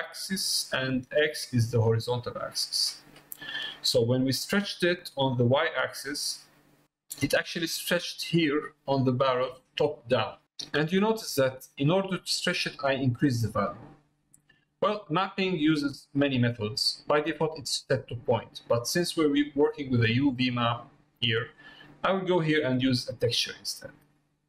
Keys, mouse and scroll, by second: 8.1 middle click, 15.3 click, 22.2-24.4 drag.